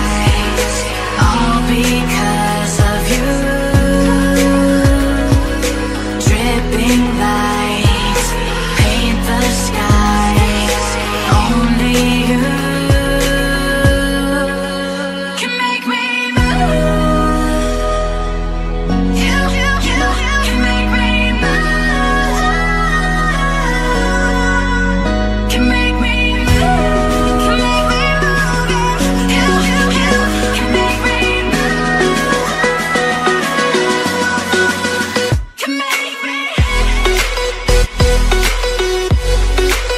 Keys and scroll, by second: 4.2 ctrl+t.